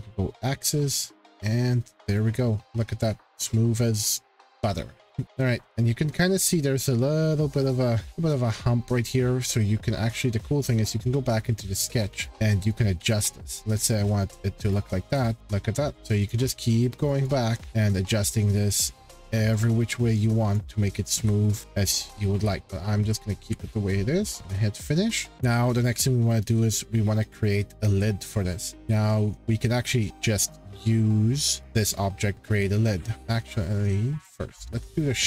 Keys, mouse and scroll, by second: 0.6 click, 1.3-1.6 scroll, 2.1 click, 5.1-6.0 scroll, 8.0 shift+scroll, 10.6 click, 10.6 scroll, 10.8 click, 11.9-12.3 scroll, 13.5 click, 13.7-14.2 scroll, 14.7 click, 15.1-15.5 scroll, 16.2 click, 17.0 click, 17.3 click, 17.7 scroll, 19.5 click, 20.5 click, 21.1 ctrl+z, 21.5 ctrl+z, 22.3 ctrl+z, 22.6 ctrl+z, 23.0 ctrl+z, 24.2-24.6 scroll down 12, 24.4 click, 24.7-25.3 scroll, 25.3 shift+middle click, 25.8 scroll, 26.5-28.0 scroll, 28.0 shift+scroll, 32.6-33.3 scroll, 33.1 click, 34.7 click.